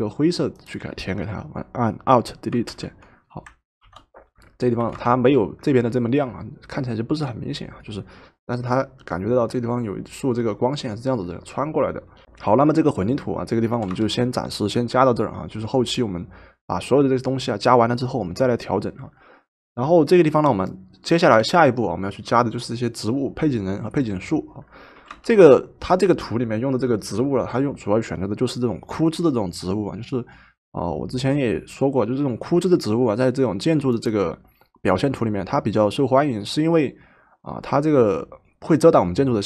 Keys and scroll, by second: 2.7 alt+Delete, 3.8 ctrl+d, 4.8 v, 13.7 v, 24.9 v.